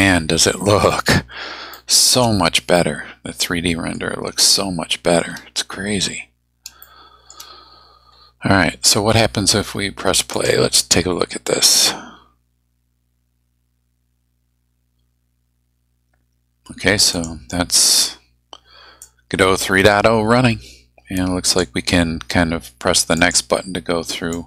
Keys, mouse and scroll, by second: 1.8 shift+middle click, 2.8-4.2 middle drag, 4.5 shift+middle click, 6.8 shift+middle click, 7.8-8.1 shift+scroll down 3, 8.2-8.6 scroll up 2, 10.3 click, 17.1 click, 19.0-20.1 drag, 21.4 click, 23.2 click, 24.3 click.